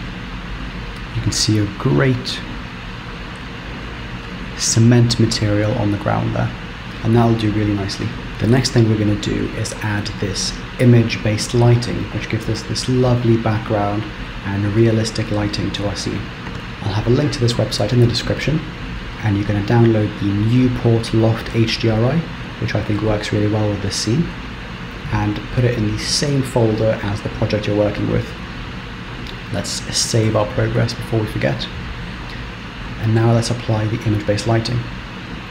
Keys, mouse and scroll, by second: 30.6 ctrl+s.